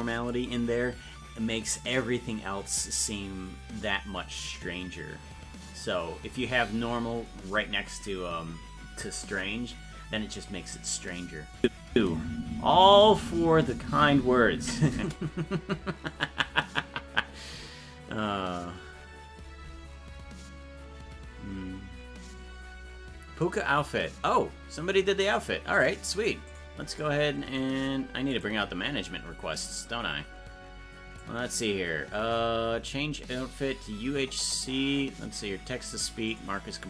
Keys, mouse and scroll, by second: 11.6 click, 11.9 space.